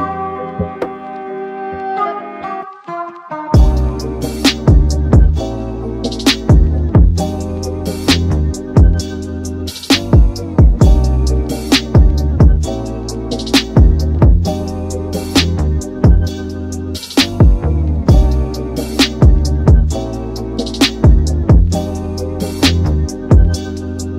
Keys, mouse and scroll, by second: 3.3 click, 6.2 Tab, 6.8 a, 7.0 a, 8.0 alt+z, 8.9 c, 22.5 click.